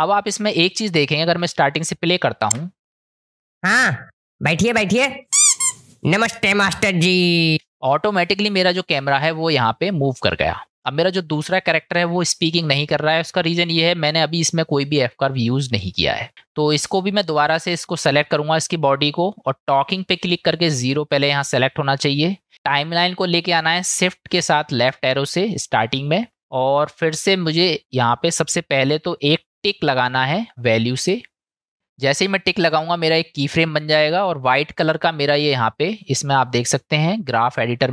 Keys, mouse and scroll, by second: 0.2 click, 1.2 click, 2.5 space, 7.5 space, 20.0-24.2 drag, 24.7 shift+Left, 31.0 click, 36.4 click.